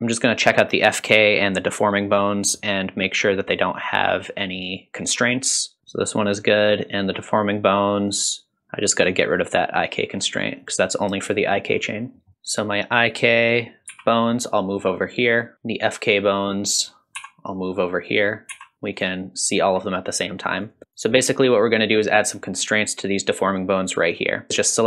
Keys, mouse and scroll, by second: 3.4 click, 6.3 click, 7.4 click, 8.0 click, 9.3 click, 10.6 click, 12.3 click, 13.1 click, 13.9 g, 16.0 click, 16.5 r, 17.1 click, 17.3 r, 17.8 click, 17.9 r, 18.9 shift+click, 19.4 shift+click, 20.6 click, 21.0 click, 21.5-22.3 drag, 24.2 click.